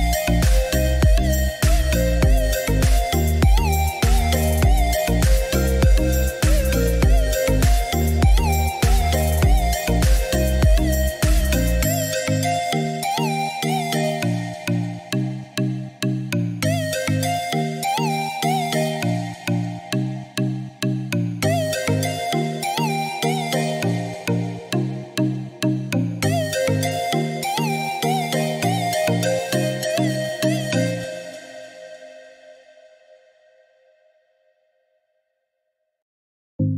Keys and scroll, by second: 30.2-31.9 typing, 36.2-36.7 typing.